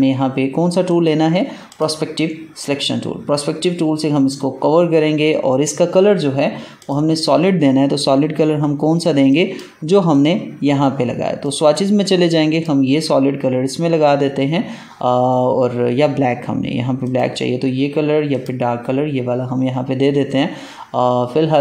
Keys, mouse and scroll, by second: 0.8 right click, 1.6 click, 9.2 click, 16.9 click.